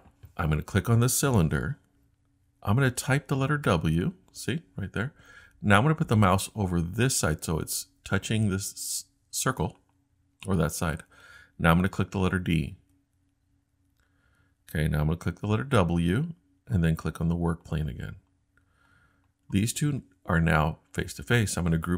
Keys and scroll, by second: 3.7 w, 12.8 d, 15.7 w.